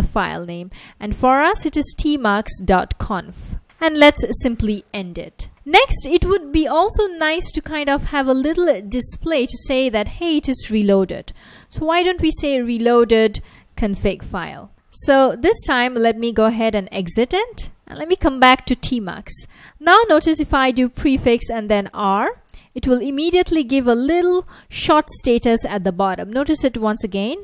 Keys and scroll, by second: 0.0-4.1 typing, 6.3 space, 7.6-15.8 typing, 16.2 Return, 17.5-18.5 typing, 21.2 ctrl+a, 21.8 r, 24.3 F1.